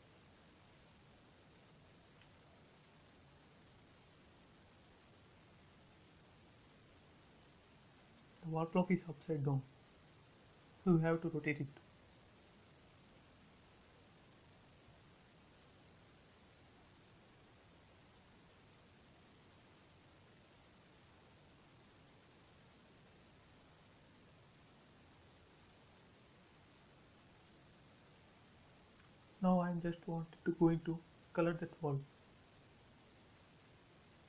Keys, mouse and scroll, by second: 0.8 click, 2.2 Left, 2.8 click, 3.0 space, 3.1 middle click, 3.6 scroll up 1, 3.8 scroll down 1, 4.0 shift+middle click, 4.3-6.6 middle drag, 6.6 scroll up 1, 6.9 shift+middle click, 7.0 shift+middle click, 7.4 scroll up 1, 8.6-9.8 scroll down 1, 9.9 scroll up 1, 10.2-12.0 middle drag, 12.0 s, 13.2 click, 14.4-15.1 typing, 14.9 Return, 16.4-18.2 middle drag, 18.2 click, 19.0 Escape, 20.1 space, 21.2 s, 22.1 click, 23.4-24.4 typing, 23.9 Return, 25.0 scroll down 1, 25.7 middle click, 26.1 scroll up 1, 26.3 scroll down 1, 26.6-28.0 shift+middle drag, 28.0-29.3 middle drag, 29.3 scroll up 1, 31.5-32.4 scroll down 1, 32.6 m, 32.7 click, 33.9 space.